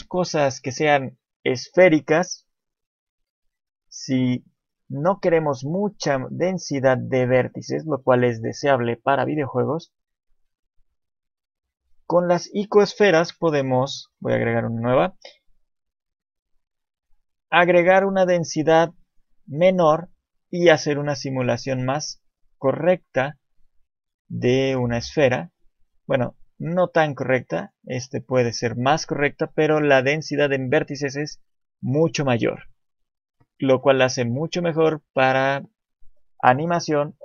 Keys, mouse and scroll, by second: 6.8 click, 8.3 click, 12.7 click, 12.7-13.1 scroll down 2, 13.1 right click, 13.6 shift+middle click, 14.1 shift+a, 18.5 click, 19.8-20.3 scroll up 1, 20.3 shift+middle click, 20.7 scroll up 1, 22.4 scroll up 1, 25.3-25.9 scroll down 2, 25.6 shift+middle click, 26.7-27.2 scroll up 1, 27.2 shift+middle click, 27.6 click, 28.0 shift+middle click, 29.3 shift+middle click, 33.0-36.2 scroll down 1.